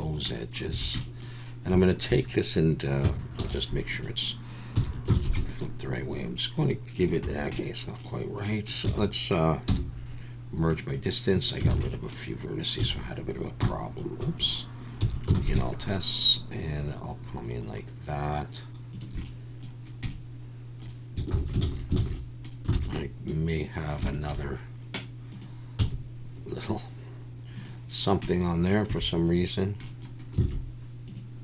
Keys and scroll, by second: 0.7 a, 3.4 alt+n, 4.8 e, 5.1 alt+s, 7.2 Escape, 8.9 a, 9.7 m, 11.7 alt+a, 12.8 a, 13.6 r, 14.2 Escape, 15.0 e, 15.3 alt+s, 21.3 ctrl+z, 21.6 ctrl+z, 22.1 ctrl+z, 22.7 alt+a, 25.8 x, 28.9 a, 30.4 alt+a.